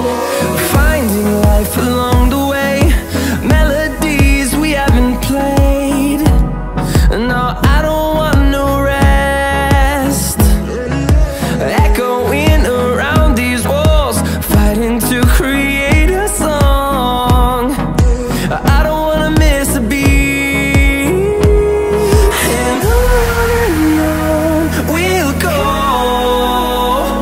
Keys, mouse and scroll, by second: 10.4 right click, 12.1 click, 12.1-17.3 drag, 22.9 click.